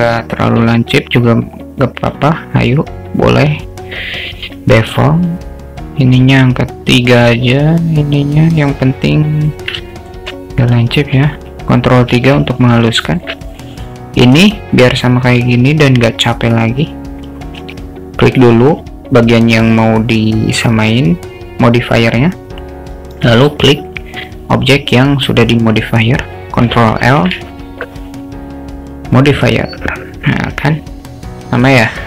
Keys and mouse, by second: 1.9-3.6 drag, 4.8 middle click, 6.2 click, 7.3-9.6 drag, 10.0 alt+shift+middle click, 12.2 ctrl+3, 13.2 shift+middle drag, 13.5 click, 17.8 click, 27.2 ctrl+l.